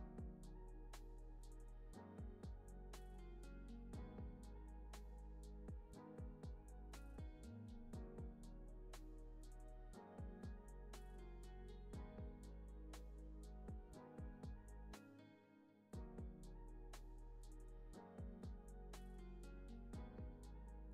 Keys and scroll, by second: 0.1 alt+x, 3.3 alt+q, 5.5 alt+x, 9.3 alt+x, 12.9 c.